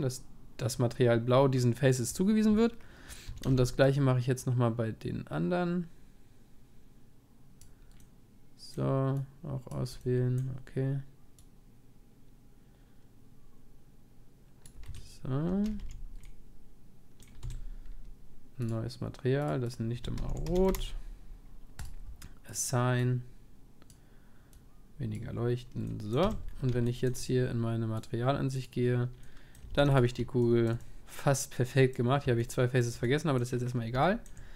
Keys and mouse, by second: 2.7-7.0 middle drag, 3.3 a, 3.5 c, 15.8 c, 18.7-26.8 drag, 25.9-29.0 middle drag, 26.2 Tab, 28.0-29.7 drag, 29.2-34.5 middle drag, 29.7 ctrl+s.